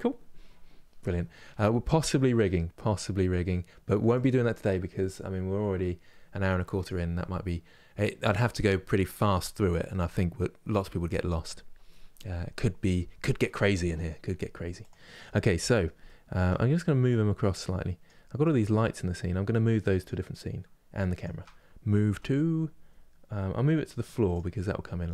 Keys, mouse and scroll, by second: 14.5 click, 15.3-17.7 middle drag, 17.7 click, 19.7 click, 20.9 shift+click, 24.0 m.